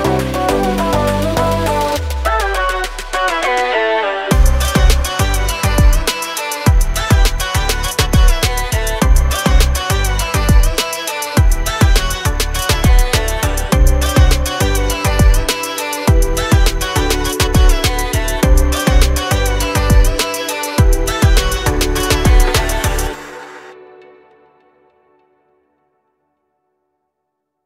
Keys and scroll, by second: 0.0-0.4 typing, 1.5 m, 2.5-3.8 typing, 5.7-9.2 typing, 11.2 p, 12.3 space, 12.5 Escape, 14.1 l, 16.6-19.2 typing, 21.9 space, 24.6 space, 27.4 m.